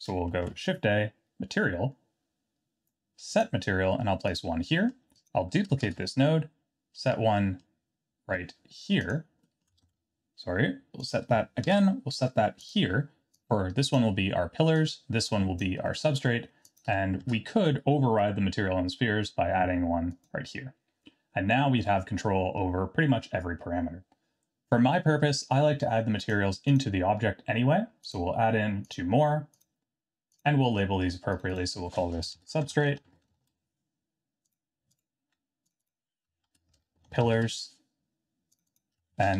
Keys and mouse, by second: 0.4 shift+a, 4.8 middle click, 5.8 shift+d, 9.5 middle click, 9.8 ctrl+z, 11.0 click, 11.6 shift+d, 13.3-14.1 drag, 14.8 click, 15.9 middle click, 16.7 click, 17.2 shift+d, 21.6-22.6 middle drag, 26.7 click, 28.8 click, 31.3 click, 31.5-34.2 drag, 34.5 click, 34.9 click, 35.7 click, 35.8-38.2 drag, 36.9 l, 38.5 click, 38.7-39.3 shift+drag.